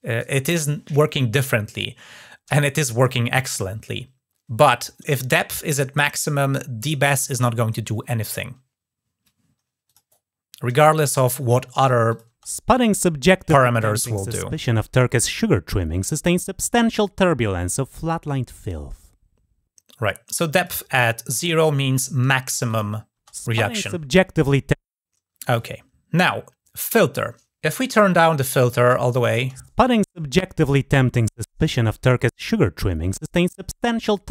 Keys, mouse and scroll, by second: 9.6 click, 11.9 click, 20.1 click, 21.4 click, 22.4 click, 28.4 click, 28.9 click.